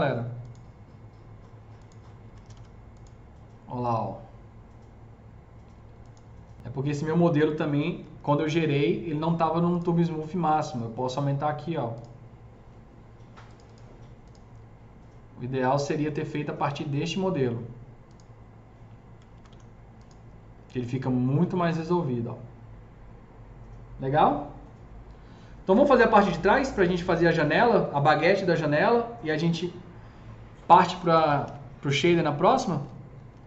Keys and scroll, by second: 2.2 F3, 2.4 F3, 2.4 F4, 8.0 F3, 8.4 F3, 8.5 F4, 19.3 F3, 19.5 F4, 31.0-31.8 typing.